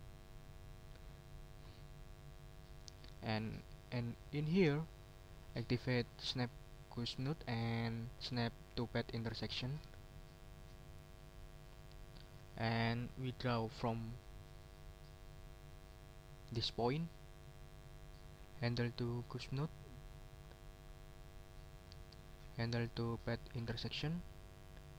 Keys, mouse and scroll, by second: 2.2 middle click, 7.2 click, 9.2 click, 9.8 middle click, 13.0 middle click, 14.3-14.9 ctrl+scroll up 4, 17.1 middle click, 20.1 click, 23.9 click.